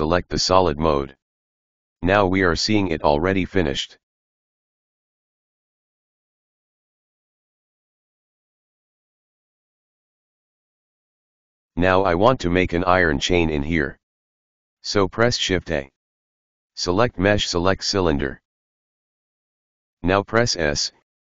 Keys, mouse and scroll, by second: 0.8 click, 1.4 right click, 1.6-3.2 middle drag, 6.4 click, 7.0 right click, 8.3 click, 9.0 click, 10.0 click, 11.0-12.2 middle drag, 12.2-13.0 scroll up 2, 13.0-13.5 scroll up 1, 13.5-14.0 scroll down 1, 14.6 shift+a, 19.8 s.